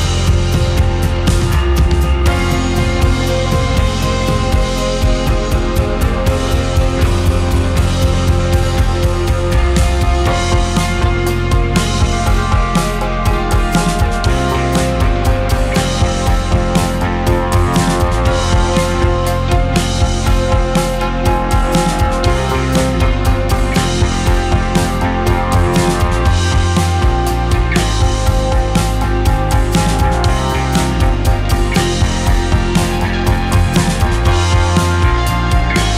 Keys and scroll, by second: 2.1 Delete, 3.1 g, 5.7 BackSpace, 5.8 BackSpace, 24.4 h, 30.7 KP_1, 30.7 KP_0, 30.8 KP_0, 31.4 Left, 31.4 Left, 31.6 Left, 31.9 KP_Decimal.